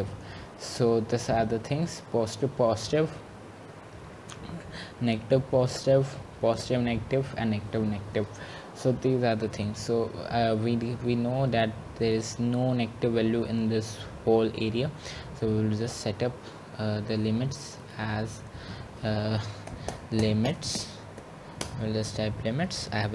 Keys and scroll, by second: 20.3 typing, 21.8-22.6 typing.